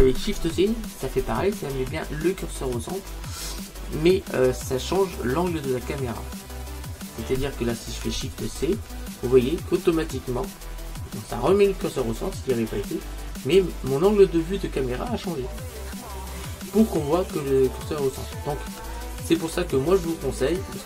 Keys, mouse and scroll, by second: 0.8-3.6 middle drag, 5.0-9.9 middle drag, 8.5 shift+c, 18.1-19.8 middle drag, 20.5-20.8 middle drag.